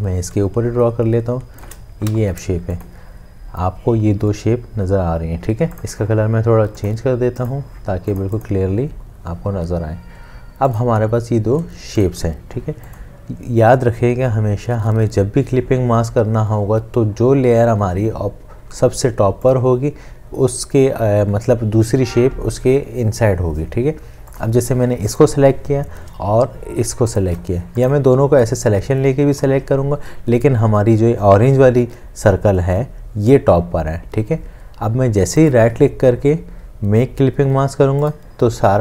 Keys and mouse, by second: 0.5 shift+click, 2.1 v, 27.5 shift+click, 35.4 right click.